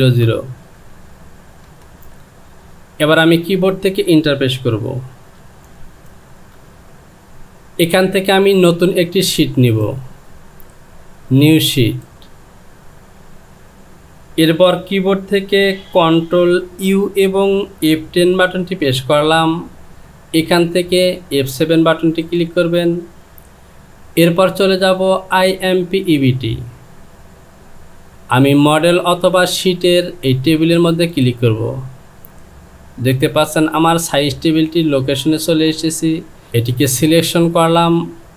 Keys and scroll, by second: 1.7 BackSpace, 5.2 Return.